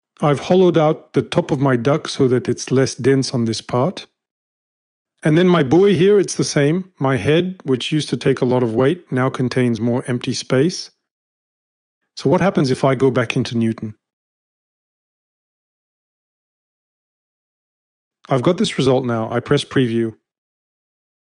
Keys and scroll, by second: 0.6 shift+v, 4.6-5.6 typing, 6.7 space, 7.2 space, 7.3 space, 7.3 space, 10.1 space, 10.4 space, 10.5 space, 10.5 space, 12.4 shift+@, 14.6 F5.